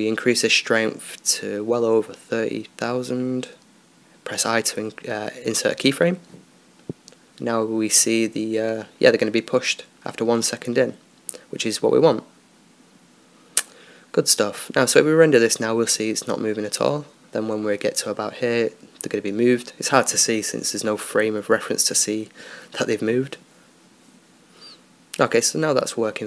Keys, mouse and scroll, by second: 1.2-2.8 drag, 6.3 i, 8.4-9.9 drag, 11.4-12.7 scroll up 1, 12.7-14.2 drag, 15.0-17.8 drag, 17.8 Escape, 18.5-25.5 drag, 25.5 Escape.